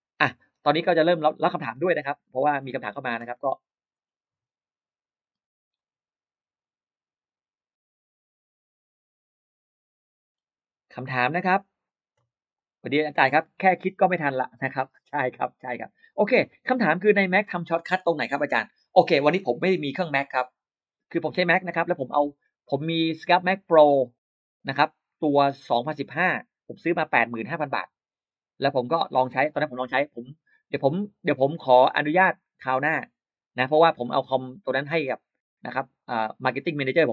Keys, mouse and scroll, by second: 0.0 click, 1.7-2.3 scroll down 2, 2.3-3.0 scroll up 4, 3.4-4.1 scroll down 4, 5.6 click, 7.1-7.4 scroll up 1, 7.7-8.0 scroll up 1, 9.8-10.4 scroll down 4, 14.9 scroll up 2, 15.6-15.9 scroll down 2.